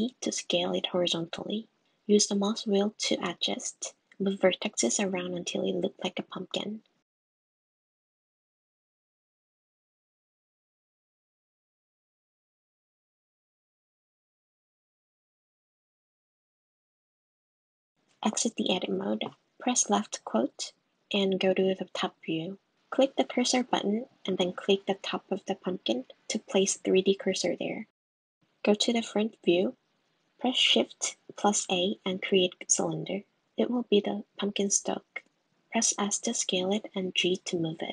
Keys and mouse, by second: 10.4 s, 14.9 g, 19.3 click, 19.9 Tab, 21.1 click, 23.4 click, 25.1 click, 27.0 click, 28.4 shift+a, 30.3 s, 31.6 g, 32.2 s, 33.4 g, 34.0 s.